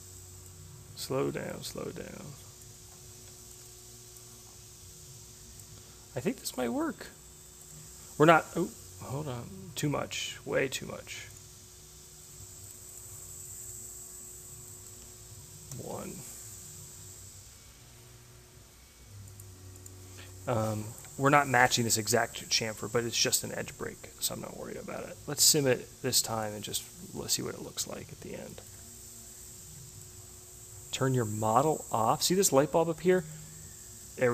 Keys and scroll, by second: 15.4 1.